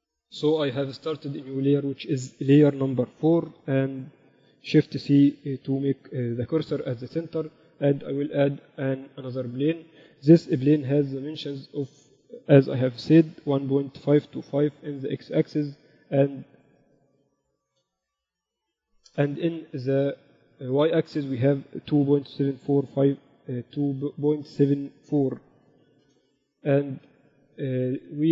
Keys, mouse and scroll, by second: 1.5-4.1 drag, 4.3 4, 5.7 shift+c, 6.3 KP_7, 8.3 shift+a, 11.2 n, 12.3-14.3 drag, 17.1-19.1 drag, 21.3-23.1 drag, 25.0 BackSpace, 26.2 BackSpace.